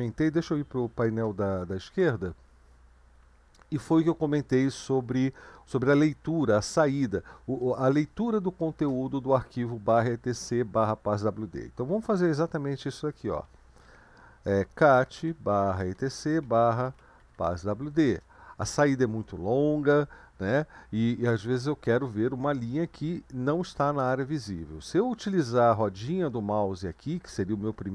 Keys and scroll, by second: 0.8 ctrl+b, 1.9 Left, 14.6-17.8 typing, 18.1 Return.